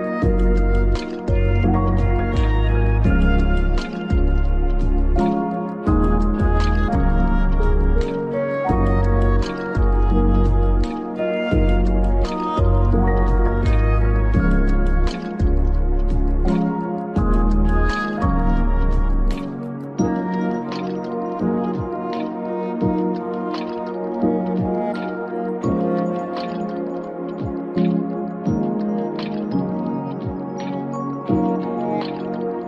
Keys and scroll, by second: 29.3 ctrl+v.